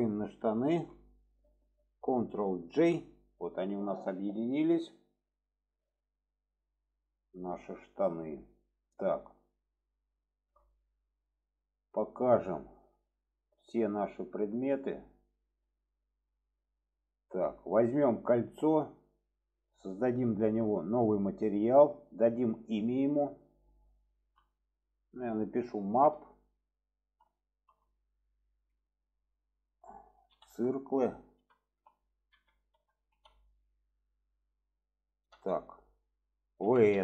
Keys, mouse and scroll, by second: 0.3 shift+click, 2.7 ctrl+j, 4.6-6.7 middle drag, 7.7-8.5 middle drag, 9.0 shift+middle drag, 10.3 shift+middle click, 14.5 click, 15.0 click, 15.8-16.2 shift+middle drag, 16.5 click, 17.1 shift+middle click, 18.4-21.3 drag, 22.3 click, 23.2-37.0 drag.